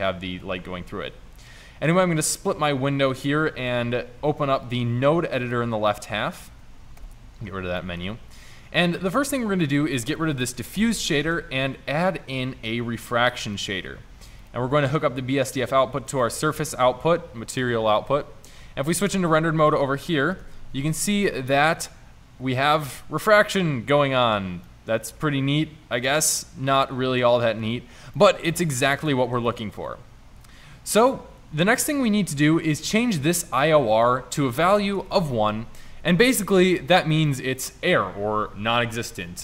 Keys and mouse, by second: 2.3 click, 2.6 click, 4.2 click, 7.0 n, 10.9 Delete, 11.3 shift+a, 17.9 click, 19.3 shift+z, 20.4 KP_Decimal, 21.4 middle drag, 24.7 middle click, 25.1 middle click, 28.9-29.5 middle drag, 36.4 middle drag.